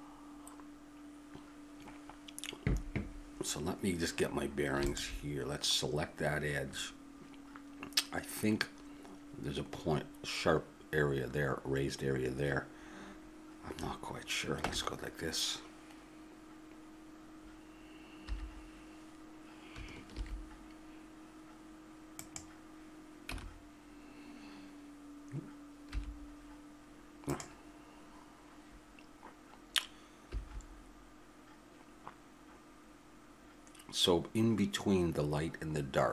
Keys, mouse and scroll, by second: 4.9-8.5 drag, 14.6 Tab, 20.1 alt+h, 23.3 Tab, 30.3 h.